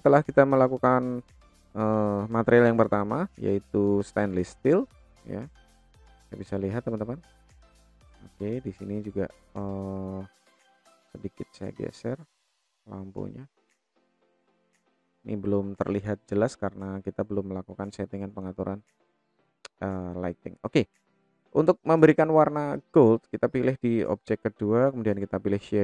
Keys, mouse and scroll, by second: 5.9-7.7 middle drag, 8.3 click, 9.9 click, 11.0-12.4 drag, 13.4 click, 16.2-16.9 drag, 18.0 click, 19.7 click, 20.3 middle click, 21.6 click, 22.1 middle click, 23.2 click, 25.3 click.